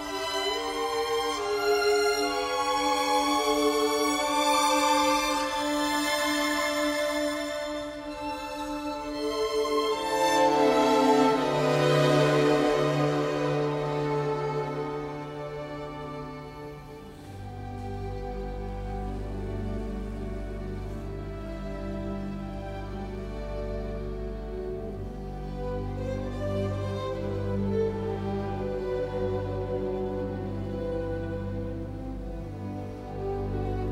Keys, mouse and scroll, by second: 16.3 t, 16.5 space, 17.3 Escape, 18.8 ctrl+g, 19.7 Escape, 20.8 middle click, 24.7 KP_1, 26.2 BackSpace, 28.0 KP_2, 29.0 Return, 29.8 Escape.